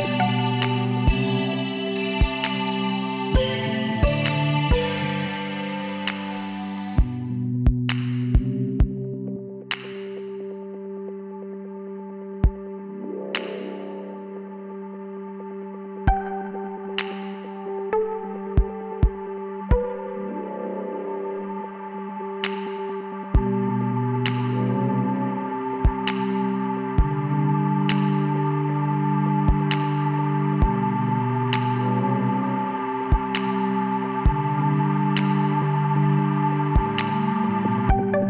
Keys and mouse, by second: 2.2 shift+a, 4.6 t, 5.7 click, 6.8-8.1 drag, 8.1 middle click, 8.8-13.2 drag, 12.6 s, 14.8 s, 16.6 KP_1, 18.3 z, 21.6-23.5 middle drag, 23.5 ctrl+i, 25.1 h, 26.5-28.3 drag, 28.0 b, 29.9-31.7 drag, 32.9-34.8 drag, 33.8 l, 35.8 s.